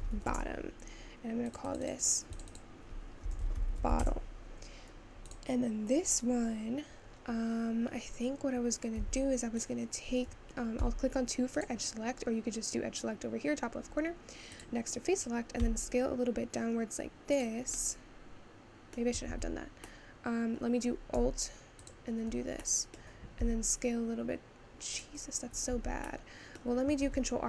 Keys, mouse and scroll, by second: 0.3 t, 1.7-4.0 drag, 4.0 t, 5.3 click, 7.3-9.1 scroll up 2, 9.1 Tab, 9.6 click, 10.8 2, 11.7 click, 14.7 click, 15.7 s, 17.7-19.4 middle drag, 19.4 ctrl+z, 19.9-21.9 middle drag, 21.9 alt+click, 22.7 middle click, 23.4 s, 25.7 ctrl+z, 26.3 middle click, 27.1 ctrl+r.